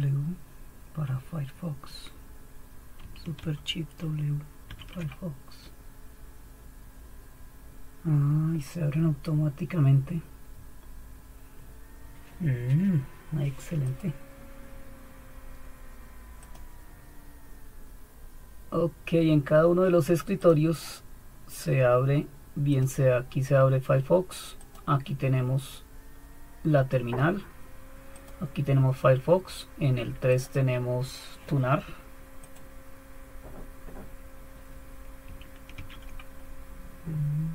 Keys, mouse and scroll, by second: 4.6 super+w, 13.9-22.9 drag, 23.8-25.8 drag, 28.2 click, 30.3 click, 30.8 click, 32.4 click, 35.7 super+1.